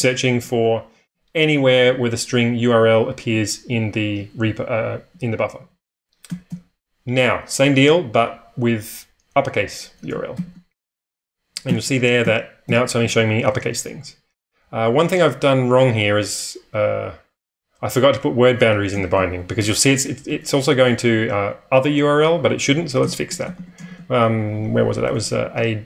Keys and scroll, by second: 0.0-6.4 typing, 10.3 shift+8, 11.6 n, 12.2 n, 13.0 n, 13.5 n, 15.5 typing, 19.0 shift+;, 20.2 ⟲, 21.0 n, 22.9-25.8 typing.